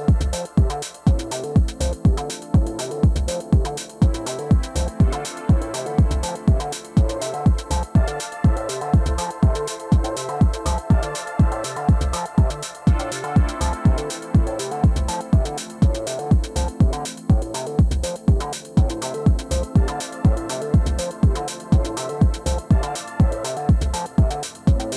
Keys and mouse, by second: 5.4 Tab, 7.9 Tab, 8.2-9.4 middle drag, 9.4 alt+w, 11.7-13.8 middle drag, 14.6 middle click, 15.9 KP_3, 16.8 f, 21.0 middle click, 21.4-24.2 drag, 24.0 ctrl+z, 24.2 middle click, 24.7 click.